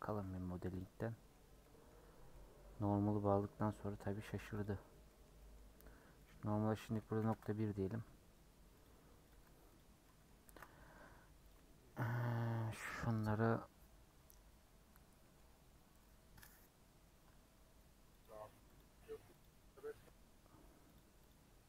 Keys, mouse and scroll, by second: 0.0 click, 0.3 Tab, 0.9 scroll down 1, 1.1 middle click, 1.3-2.3 scroll up 3, 1.6 middle click, 2.3 middle click, 3.2 scroll down 2, 3.3-4.5 middle drag, 4.5-9.3 drag, 9.3 Tab, 9.8 scroll down 3, 10.0-11.5 middle drag, 11.5 click, 12.0-12.5 scroll up 2, 12.9 scroll up 1, 15.2-19.4 middle drag, 19.4 click, 19.8-20.9 middle drag, 20.9-21.6 drag.